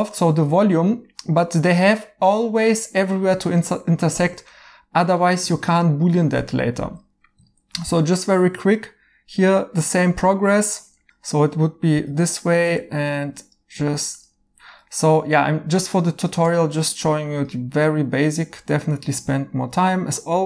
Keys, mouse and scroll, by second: 3.6 right click, 7.9 f, 11.1 right click, 11.9 f, 14.7 right click, 16.4 1.